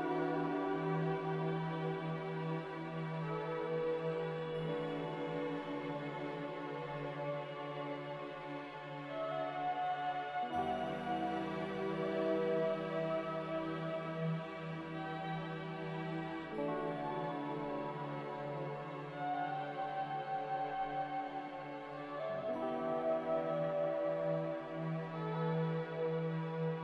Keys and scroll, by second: 5.6 z, 7.6-8.5 typing, 10.2-10.9 typing, 13.0 c, 21.9 x, 23.0-26.8 typing.